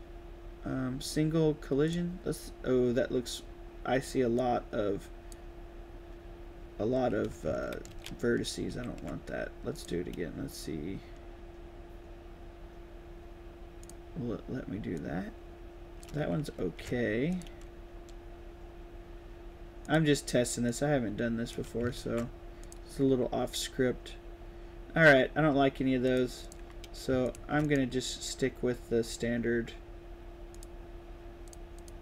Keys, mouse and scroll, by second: 1.8 click, 4.3-5.2 drag, 7.8 ctrl+z, 8.6 ctrl+z, 9.7 click, 13.8 click, 14.9-15.9 drag, 16.5 ctrl+z, 17.2 click, 19.8 click, 20.6-21.4 drag, 21.9 ctrl+z, 22.5 click, 26.0 click, 26.4 click, 27.2 shift+click, 27.6 right click, 30.4 click, 31.4 click, 31.7 click.